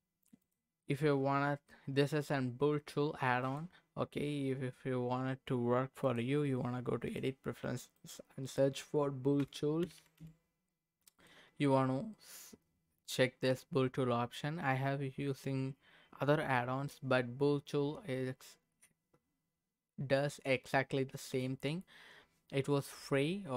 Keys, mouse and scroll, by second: 0.4 click, 3.4 click, 6.0-7.2 drag.